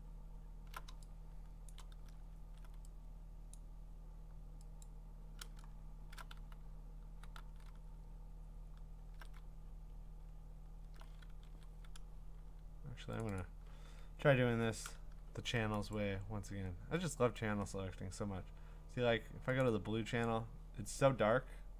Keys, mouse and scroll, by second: 0.0-0.3 scroll down 9, 0.3-0.7 scroll, 1.4-2.4 scroll, 3.5 alt+click, 4.8 alt+click, 5.6-6.1 scroll, 7.6-10.9 scroll, 11.3 ctrl+d, 13.2 click, 13.4 click, 14.3-14.8 scroll, 15.9 click, 17.1 click, 19.6 click, 20.2 click.